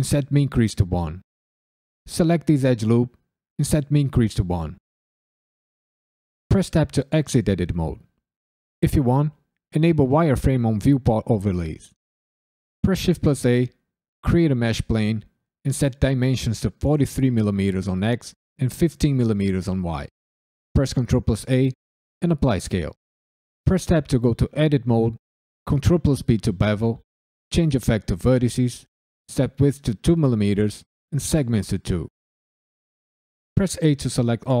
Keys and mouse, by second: 0.7 click, 1.7 click, 2.3 ctrl+click, 3.0 ctrl+click, 3.5 ctrl+click, 4.1 click, 6.5 Tab, 8.5-12.0 drag, 12.8 shift+a, 15.7-19.0 drag, 20.7 ctrl+a, 23.6 Tab, 25.6 ctrl+b, 26.4 click, 28.2 click, 28.9-31.8 drag, 33.5 a.